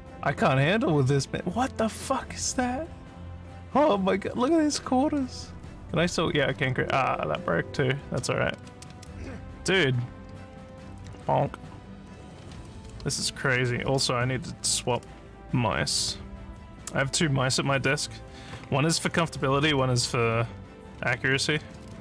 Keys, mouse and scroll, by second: 0.3 w, 2.3 s, 2.8 w, 4.3 d, 6.6 ctrl+s, 8.5 w, 8.9 w, 8.9 space, 10.1 w, 10.6 s, 10.8 w, 11.9-13.5 typing, 20.8-22.0 typing.